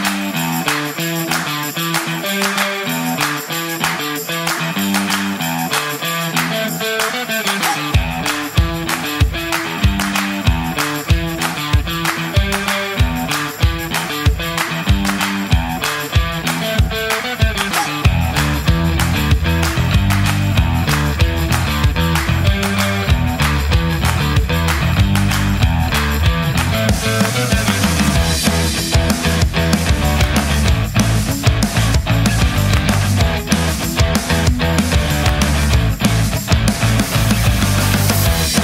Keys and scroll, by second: 0.6 Return.